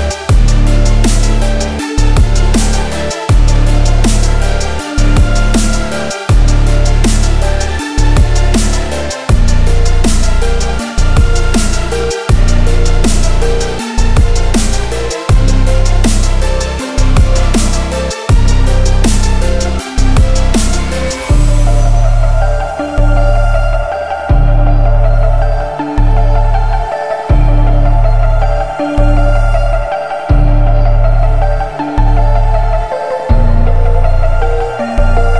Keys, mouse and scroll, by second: 2.5-3.4 middle drag, 3.4-3.8 scroll up 6, 4.0-4.5 shift+middle drag, 4.5 s, 7.5 scroll down 3, 7.7-8.8 middle drag, 8.8 g, 10.3-11.5 middle drag, 11.5-12.0 scroll down 3, 12.0-15.9 middle drag, 15.9 scroll down 2, 16.1-19.0 middle drag, 19.0 click, 21.1 shift+middle click, 21.6 a, 22.5-22.8 scroll down 2, 22.8-23.9 shift+middle drag, 23.9 a, 25.7-28.9 drag, 29.7 scroll up 1, 30.2-31.9 middle drag, 31.9-32.3 scroll up 1, 32.3-35.3 shift+middle drag.